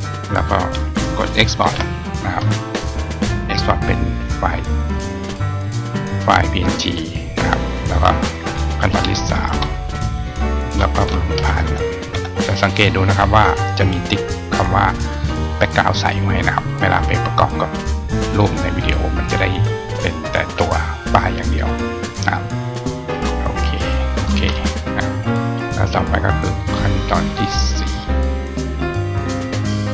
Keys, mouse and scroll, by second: 22.7 click, 24.0 click, 26.5 click, 27.6-28.0 scroll down 1, 28.8 click.